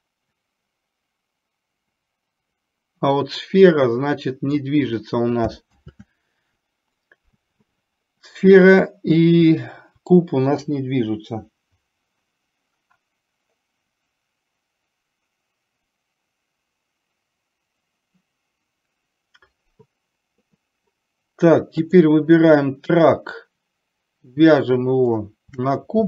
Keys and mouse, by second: 5.9 ctrl+z, 25.3 shift+click.